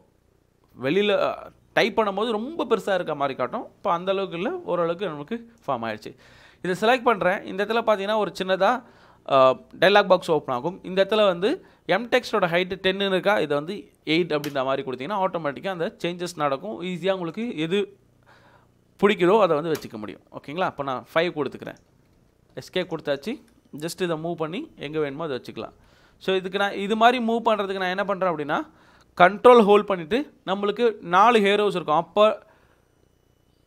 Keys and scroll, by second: 14.0 8, 14.4 Return, 19.1 5, 19.8 Return, 21.4 Escape, 21.9 Escape, 22.2 Escape, 24.5 ctrl+Right, 25.0 ctrl+Right, 25.6 ctrl+Down, 25.6 ctrl+Down, 25.7 ctrl+Down, 25.8 ctrl+Down, 26.8 ctrl+Up, 27.1 ctrl+Up, 27.4 ctrl+Down, 27.6 ctrl+Up, 28.0 ctrl+Left, 28.2 ctrl+Right, 28.5 ctrl+Up, 29.8 ctrl+Left, 32.1 ctrl+Down.